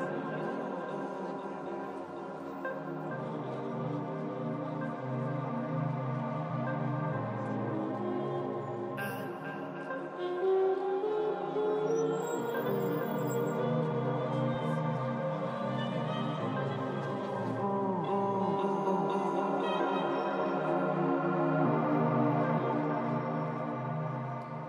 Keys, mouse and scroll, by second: 0.5 z, 0.8 z, 1.2 middle click, 1.4-4.0 drag, 4.0 middle click, 4.6-10.0 drag, 4.8 f, 5.0 middle click, 5.9 f, 6.2 middle click, 7.9-9.4 middle drag, 8.8 f, 9.6-11.5 middle drag, 10.9-12.2 drag, 11.6-12.9 middle drag, 11.8 f, 12.2 f, 12.7-18.6 drag, 13.1 shift+f, 14.0-15.1 middle drag, 14.7 f, 15.3 middle click, 17.5-21.0 middle drag, 19.7 shift+c, 19.8 f, 21.0-24.6 drag, 21.4 f, 23.6-24.6 middle drag.